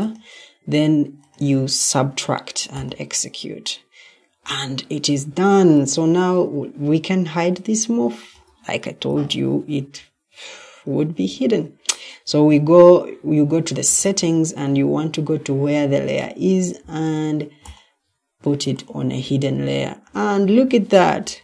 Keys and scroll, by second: 6.0 Escape, 20.3 Escape.